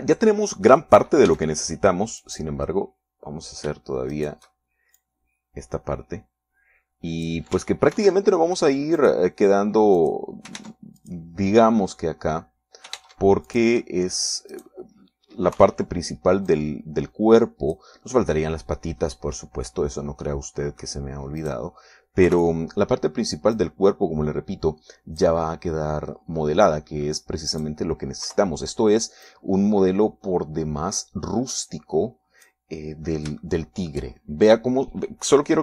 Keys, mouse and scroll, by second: 2.1 middle click, 2.7 a, 3.6 right click, 5.5 shift+right click, 6.4-8.9 drag, 9.3 ctrl+r, 10.4 click, 11.3 click, 11.9 ctrl+Tab, 12.4 ctrl+click, 14.3 ctrl+Tab, 14.9 ctrl+click, 15.3 ctrl+middle click, 15.9 right click, 16.9 KP_3, 17.9-19.3 drag, 21.7 middle click, 22.8 middle click, 23.7 KP_3, 25.0-26.8 drag, 27.1 middle click, 28.1 middle click, 28.9 right click, 29.7 KP_3, 30.7-34.1 drag, 34.8 shift+middle click.